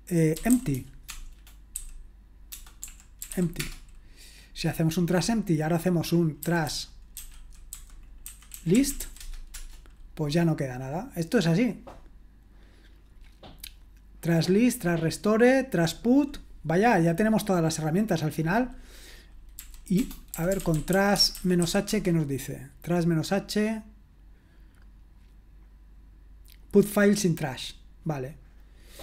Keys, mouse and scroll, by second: 0.1-3.8 typing, 6.2-9.5 typing, 9.5 Return, 19.6-22.1 typing, 28.8-29.0 typing.